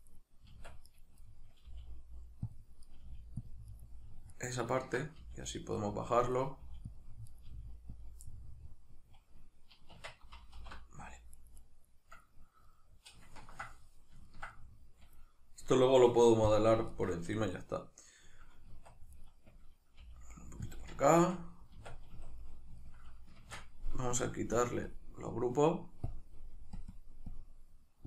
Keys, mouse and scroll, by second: 0.1 right click, 0.5 Tab, 0.9 right click, 1.2-2.6 middle drag, 1.7 g, 2.6 click, 2.8 right click, 3.0 g, 3.5 click, 3.7 right click, 4.3 ctrl+right click, 5.2 g, 6.1 click, 6.3 right click, 6.6 g, 6.9 click, 7.3 right click, 7.5 g, 8.0 click, 8.2-11.3 middle drag, 9.9 Tab, 10.6 alt+h, 11.3-12.7 right drag, 12.7-19.2 middle drag, 18.7 Tab, 19.2 right click, 20.0 g, 20.8 click, 21.2 Tab, 22.2 a, 22.5-24.2 middle drag, 23.4 shift+Tab, 24.2-28.0 drag.